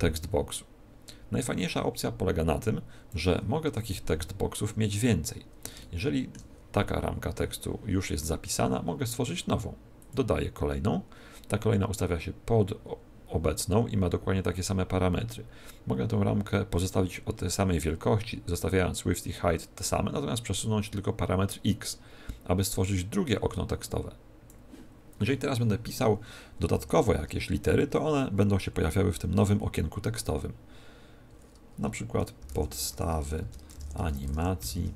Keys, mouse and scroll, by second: 3.6 Tab, 4.8-5.5 scroll down 3, 5.7 shift+middle click, 9.9 click, 10.9-11.2 scroll down 4, 19.8 click, 26.6 ,, 27.1 space, 32.3-34.9 typing.